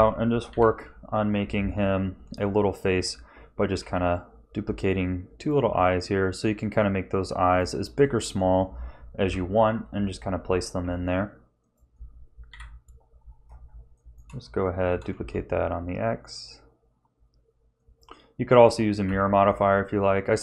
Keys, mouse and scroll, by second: 0.5 KP_1, 1.3 z, 3.8 g, 5.7 s, 8.0 shift+middle click, 9.2 KP_7, 10.8 g, 12.5 KP_1, 13.4 scroll up 2, 13.9 shift+middle click, 14.9 shift+d, 19.0 a, 19.4 middle click.